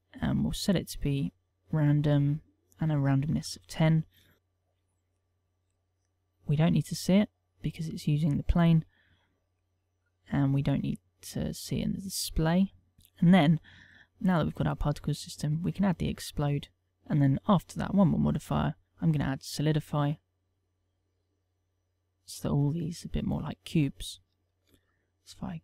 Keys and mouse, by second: 2.4 ctrl+click, 4.3 middle click, 5.1 middle click, 6.3 click, 8.7 middle click, 10.1 click, 11.3 click, 11.9 middle click, 12.9 click, 14.7 click, 16.9 click, 17.1 click, 19.9 middle click, 20.5 click, 23.9 ctrl+middle click, 24.4 KP_0.